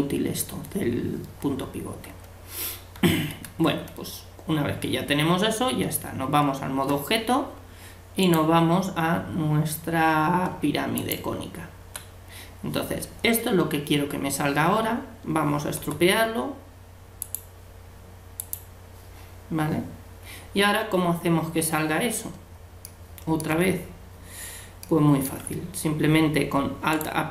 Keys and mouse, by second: 3.0 a, 3.3 a, 5.8 Tab, 8.2-10.1 drag, 9.2 Tab, 15.8 u, 22.9-27.0 middle drag, 27.0-27.3 right drag.